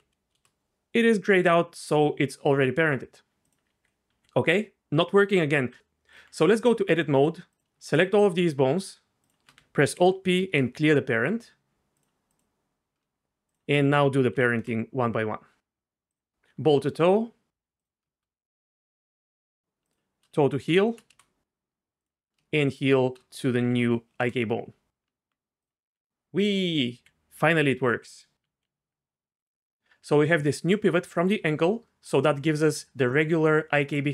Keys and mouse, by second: 2.0 Tab, 3.4 click, 3.7 g, 5.2-5.7 right drag, 5.2 g, 5.7 Tab, 6.5 Tab, 7.6 click, 8.8 shift+click, 9.9 alt+p, 12.3 click, 14.3 ctrl+p, 17.0 ctrl+p, 17.8 click, 19.8 shift+click, 20.7 ctrl+p, 22.0 click, 23.6 ctrl+p, 25.1 Tab, 25.6 click, 25.9 g, 26.7 click, 26.9 r, 28.4 r, 28.5 r, 29.8 r, 30.2 r, 31.4 r, 31.5 r.